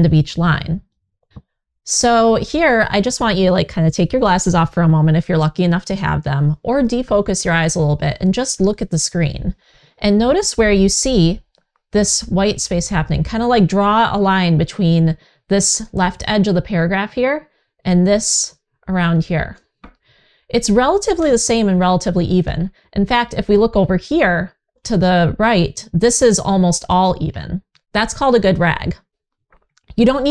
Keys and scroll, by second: 0.4 w.